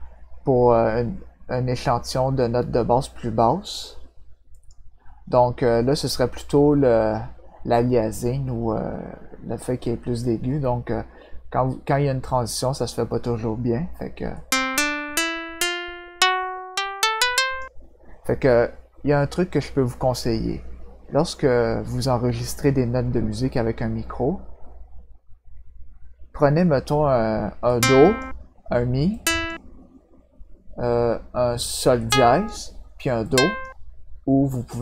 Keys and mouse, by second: 4.5 click, 14.3-17.5 drag, 27.6 click, 29.1 click, 32.0 click, 33.2 click.